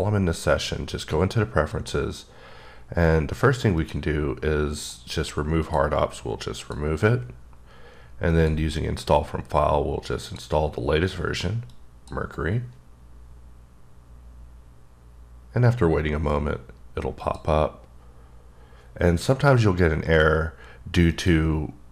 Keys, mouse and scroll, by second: 1.7 click, 3.8 click, 4.8 click, 5.6 click, 6.6 click, 8.3 click, 10.2 click, 11.7 click, 17.1 click, 21.1 click.